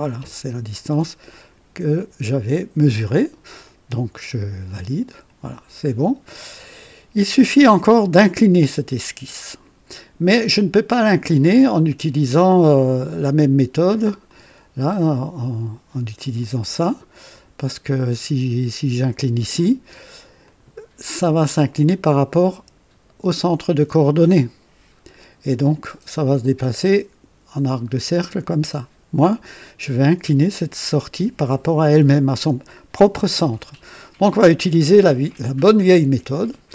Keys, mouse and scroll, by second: 4.6 click, 14.2 click, 16.3 click, 17.3 click, 20.4 click, 34.4 click, 35.2 right click.